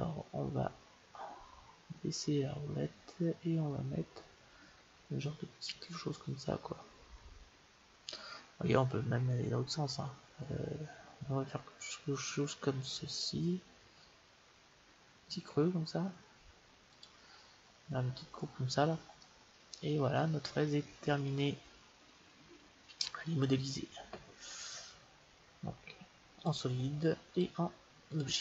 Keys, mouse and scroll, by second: 19.2-21.0 middle drag, 24.6-26.5 drag, 27.3-28.4 drag.